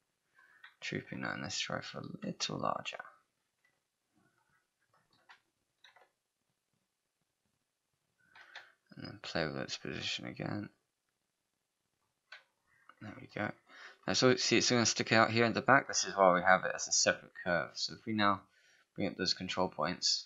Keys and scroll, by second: 5.9 r, 8.4 w.